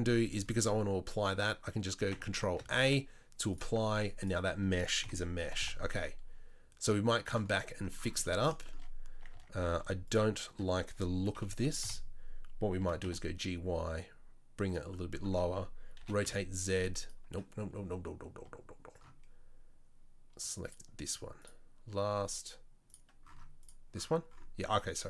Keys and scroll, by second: 2.6 ctrl+a, 5.0 KP_7, 5.4 g, 9.1 Tab, 9.3 Tab, 11.3 KP_3, 11.8 KP_1, 12.8 g, 16.0 r.